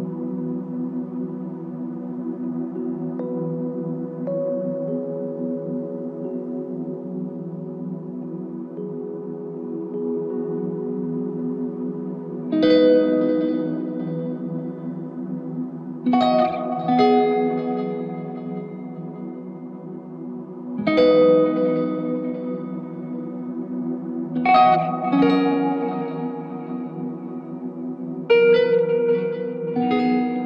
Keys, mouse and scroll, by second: 0.3 alt+click, 2.5 alt+l, 2.9 ctrl+click, 5.6 alt+click, 7.3 alt+click, 8.4 ctrl+click, 14.2 ctrl+click, 15.6 alt+click, 18.5 alt+click, 22.2 r, 28.9 alt+click, 29.8 alt+click, 30.0 ctrl+alt+click.